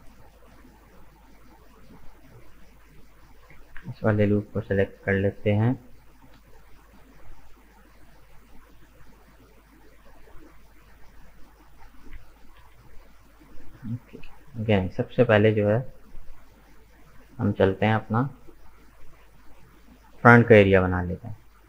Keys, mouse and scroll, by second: 2.4-3.4 middle drag, 3.4 alt+right click, 3.9-6.1 middle drag, 6.1 right click, 6.4-7.5 middle drag, 7.5 shift+right click, 8.3 shift+right click, 8.9 shift+right click, 9.4-11.8 middle drag, 11.8 g, 14.3 KP_1, 16.7 shift+middle click, 17.4 right click, 18.0-21.0 shift+middle drag.